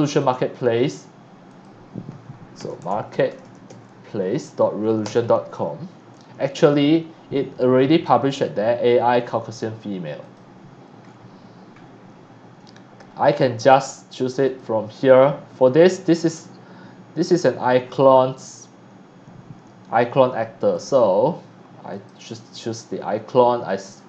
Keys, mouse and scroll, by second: 1.5 click, 2.3-3.5 typing, 5.0 Return, 6.6 click, 7.1 scroll down 1, 10.2 click, 20.7 click.